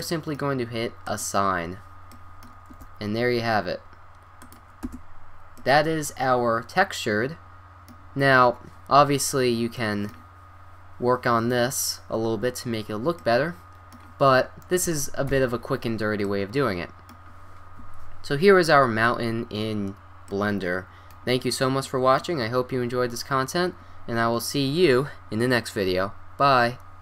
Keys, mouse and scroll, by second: 0.1-1.1 middle drag, 1.1-2.1 drag, 2.1 middle click, 2.8 a, 4.3 middle click, 4.9 Tab, 5.1 middle click, 5.6-6.4 middle drag, 7.2 middle drag, 8.0 middle click, 8.7-13.5 middle drag, 13.7 middle click, 13.8-14.4 middle drag, 14.5 middle click, 15.3 KP_5, 18.6 KP_1, 18.7-20.3 middle drag.